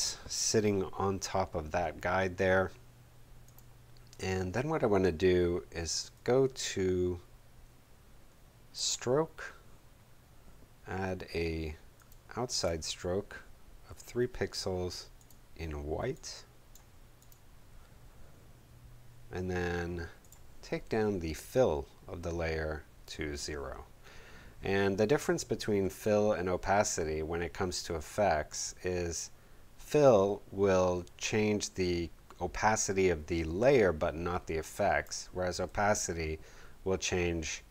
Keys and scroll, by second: 13.8 shift+3.